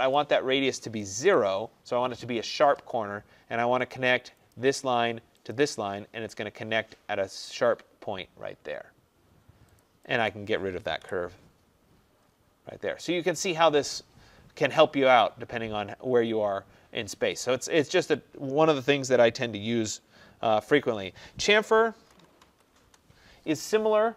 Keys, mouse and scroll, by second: 0.2 click, 1.1 0, 4.6 click, 5.6 click, 7.0-7.6 scroll, 7.6 middle click, 7.6 middle click, 9.9 click, 10.4 click, 11.1 Delete, 11.9 middle click, 12.0 middle click, 12.3 middle click, 13.6 middle click, 15.3 middle click, 15.3 middle click, 15.5 middle click, 15.5 middle click, 22.0-22.5 typing, 22.9 Return.